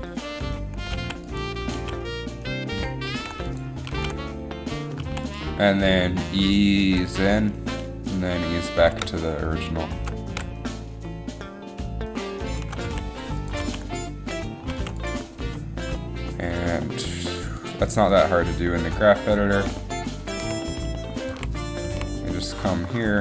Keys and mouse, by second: 0.9 alt+a, 1.2 alt+a, 1.9 alt+a, 3.4 alt+a, 4.0 alt+a, 5.3 alt+a, 9.0 g, 9.1 g, 10.4 g, 10.5 g, 13.5 a, 14.9 alt+a, 16.6 alt+a, 21.7 a, 22.0 a.